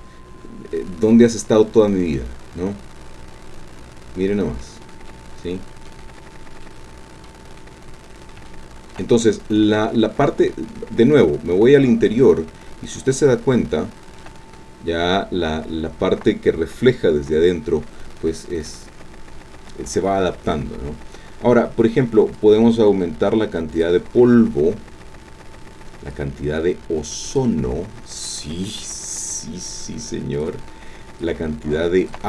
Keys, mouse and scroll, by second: 0.6-1.0 scroll down 2, 1.1-4.8 drag, 5.1 click, 6.7 click, 7.6-8.2 scroll up 2, 8.2 scroll up 1, 8.5-9.9 shift+drag, 10.2-10.7 scroll down 2, 10.9-12.1 scroll up 2, 12.1-13.0 scroll up 2, 13.1-14.4 shift+drag, 17.6-18.1 scroll down 2, 18.3-18.6 scroll down 2, 22.4-24.0 drag, 26.1-27.5 drag, 29.2-30.6 drag, 31.2-32.2 drag.